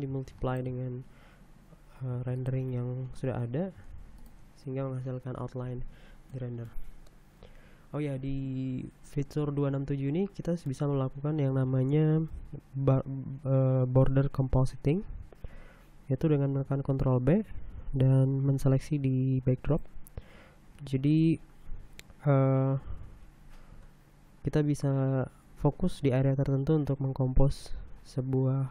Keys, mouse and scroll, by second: 0.0 middle click, 0.4 middle click, 6.6 middle click, 8.2 middle click, 10.2-11.5 middle drag, 18.1 ctrl+b, 18.6-20.7 drag, 22.0-22.6 scroll up 2, 24.1 scroll down 1.